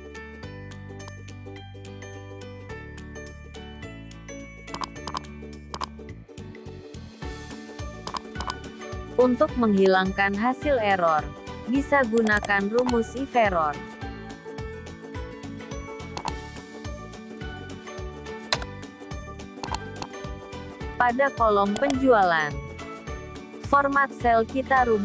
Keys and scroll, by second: 22.4 ctrl+1.